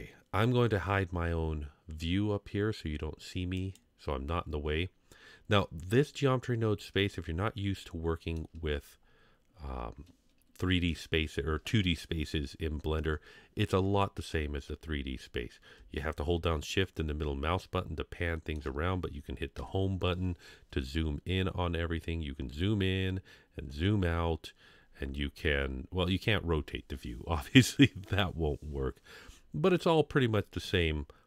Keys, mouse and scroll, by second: 7.1-8.4 shift+middle drag, 10.2-12.8 scroll down 1, 13.6-14.4 scroll down 2, 16.7-18.6 shift+middle drag, 19.6 Home, 23.3 scroll up 1, 29.2-31.2 scroll up 4.